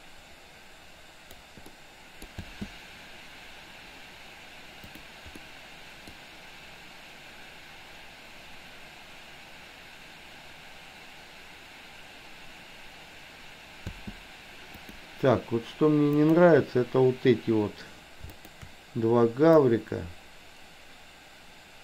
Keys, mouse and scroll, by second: 1.7-2.4 middle drag, 2.5 space, 5.4-6.2 middle drag, 13.9 space, 14.9 click, 16.2 click, 18.4 shift+click, 19.6-21.8 drag.